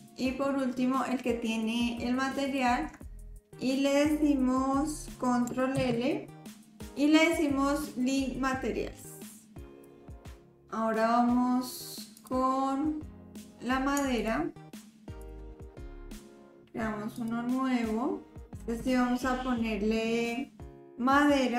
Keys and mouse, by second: 2.5 shift+click, 5.7 ctrl+l, 12.1 click, 14.1 shift+click, 17.2 click, 18.5-21.5 drag.